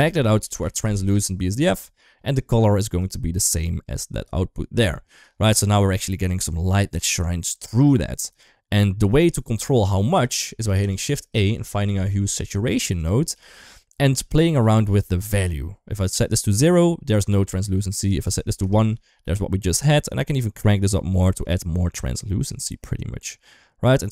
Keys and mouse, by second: 1.9 middle click, 2.8 click, 3.0-4.0 drag, 5.3 click, 5.8-6.2 middle drag, 7.6 click, 7.7 click, 8.9 shift+middle click, 10.4 shift+a, 13.1 g, 15.2-16.9 drag, 17.8 click, 19.6-24.1 drag.